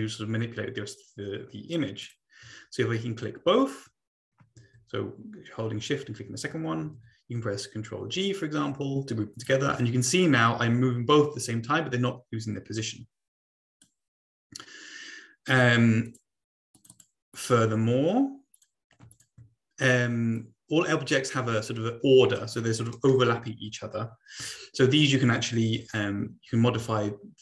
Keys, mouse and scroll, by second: 2.0-2.8 shift+drag, 6.9 ctrl+g, 9.4-10.3 drag, 10.5-14.0 drag, 16.0 click, 16.7 click, 17.3 click, 18.5 click, 19.1 click, 20.3-22.4 drag, 26.7 Page_Down.